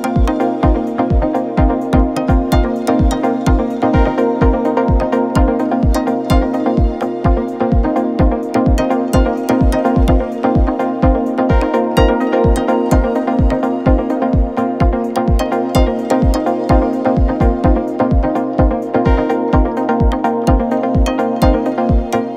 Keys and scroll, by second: 7.1 F1, 7.9 Delete, 9.3 Delete, 10.8 Delete, 11.3 F1, 11.6 4.